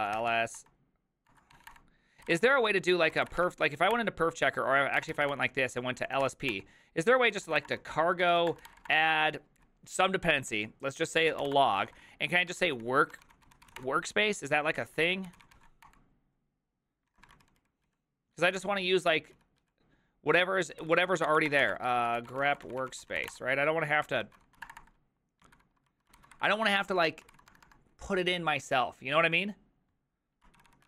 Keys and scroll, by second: 0.0-9.3 typing, 11.1-16.1 typing, 17.1 ctrl+a, 17.3 [, 17.5 ctrl+u, 17.6 ctrl+u, 18.4 ctrl+u, 19.1 ctrl+u, 19.4 ctrl+u, 19.8 ctrl+u, 20.8 ctrl+c, 21.0 ctrl+c, 21.3 Up, 21.4-25.0 typing, 25.6 ctrl+w, 26.2 ctrl+c, 26.4 Up, 26.8 ctrl+w, 27.3 ctrl+w, 27.5 BackSpace, 27.7 BackSpace, 30.6-30.8 typing.